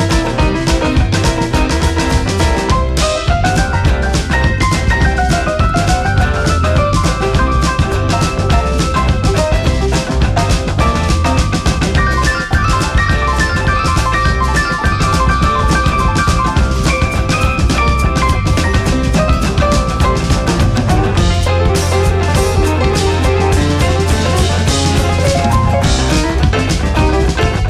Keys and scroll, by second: 2.3 Down, 3.9 Down, 4.6 Up, 4.9 Left, 5.1 Up, 5.4 Left.